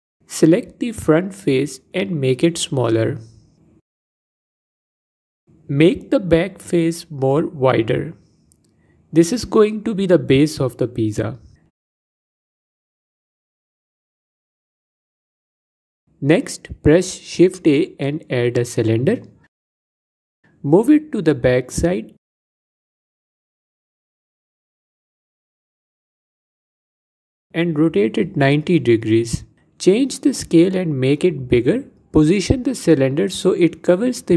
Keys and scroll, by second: 0.9 s, 8.2 s, 11.2 Tab, 17.0 shift+a, 28.6 r, 32.3 s.